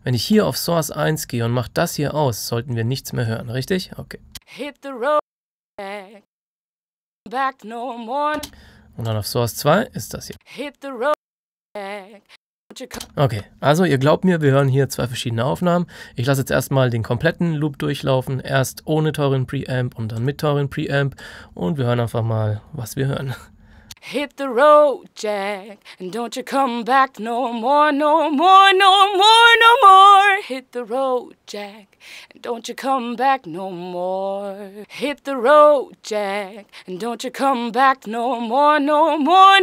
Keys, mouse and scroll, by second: 4.3 click, 8.3 space, 9.0 click, 10.3 space, 11.0 click, 12.9 space, 14.4 click, 20.1 click, 23.8 click, 34.8 space, 37.3 click.